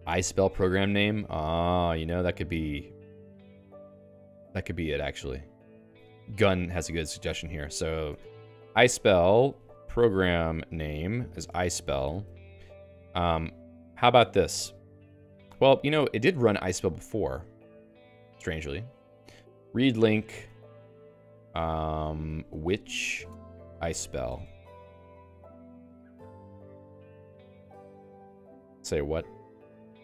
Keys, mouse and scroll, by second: 6.9 click, 8.5-10.6 typing, 10.7 ctrl+j, 10.9 ctrl+j, 12.3 ctrl+g.